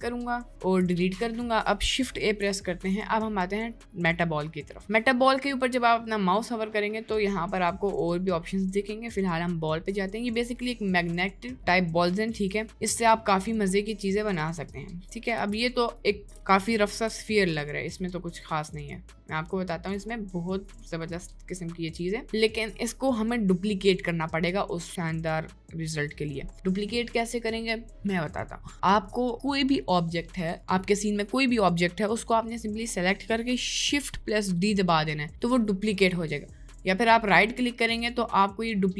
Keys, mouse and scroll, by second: 2.2 shift+a, 37.3-38.9 right drag.